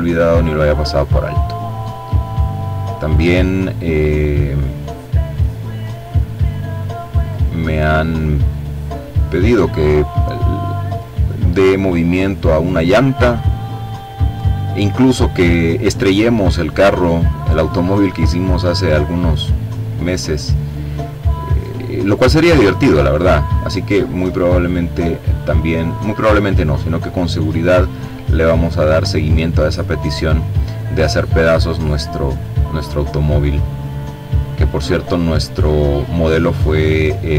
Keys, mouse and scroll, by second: 1.8-4.1 drag, 4.3-5.6 drag, 6.3-7.8 drag, 8.2-9.3 drag, 9.7-12.6 drag, 14.0-15.3 drag, 15.4-18.8 drag, 19.5-21.0 drag, 21.8-23.3 drag, 23.8 click, 24.7-26.0 drag, 26.2-27.4 drag, 27.8-29.0 drag, 30.0-32.1 drag, 32.3 click, 33.3-34.4 drag, 34.5 click, 35.4-36.9 drag, 37.1-37.3 drag.